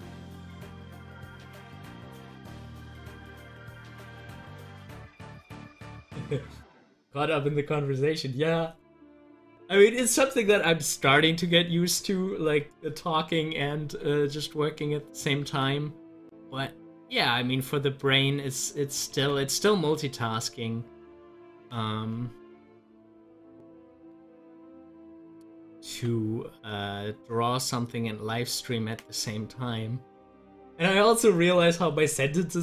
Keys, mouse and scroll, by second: 5.7 click, 13.0 double click, 14.4 click, 15.4 ctrl+z, 19.1 ctrl+z, 24.0 ctrl+z, 25.8 ctrl+z, 31.9-32.6 drag.